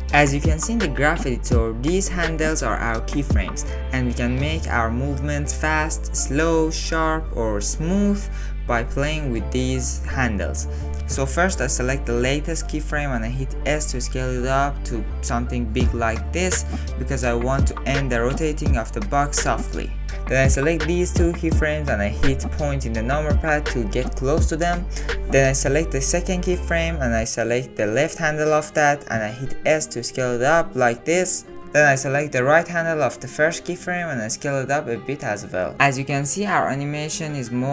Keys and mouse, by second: 1.7 click, 2.7 click, 3.3-3.6 drag, 4.4 r, 6.5 s, 8.5 ctrl+z, 8.7 ctrl+z, 9.1 ctrl+z, 12.0 click, 13.3 s, 16.7-20.6 drag, 21.0-21.6 drag, 22.4 KP_Decimal, 24.4 ctrl+middle click, 25.6 shift+middle click, 27.3 click, 28.2 click, 28.9 s, 30.8 click, 31.6 click, 31.9 s, 34.0 Home, 35.0-36.1 drag, 36.1 space.